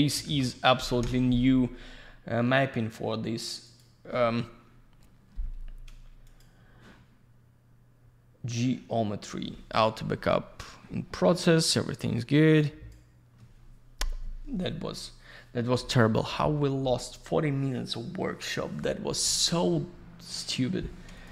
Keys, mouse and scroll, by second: 0.1 middle click, 0.2 middle click, 0.9 F4, 3.6 click, 3.7 click, 6.2 click, 6.3 click, 12.1 click, 21.1 click, 21.2 click.